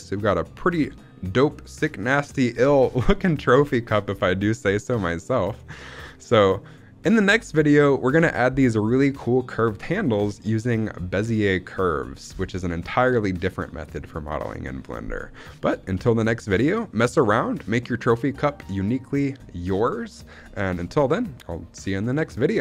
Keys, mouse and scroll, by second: 3.3-3.9 middle drag, 3.9-4.5 scroll down 2, 4.5-4.8 scroll down 1, 4.8 middle click, 5.3 middle click, 7.6 middle click, 15.8-18.9 scroll up 1.